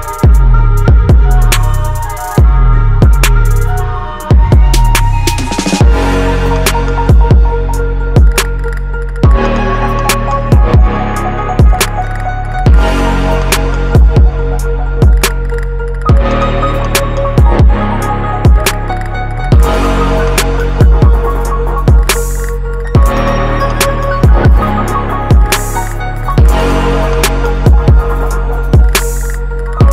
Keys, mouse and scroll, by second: 0.4 click, 2.0 click, 5.4-12.4 drag, 12.8-14.4 alt+drag, 16.0-18.9 drag, 17.3 KP_0, 19.7 click, 20.3 click, 20.8 click, 24.4 click, 25.0-26.3 drag, 27.1-29.6 drag, 28.1 KP_0.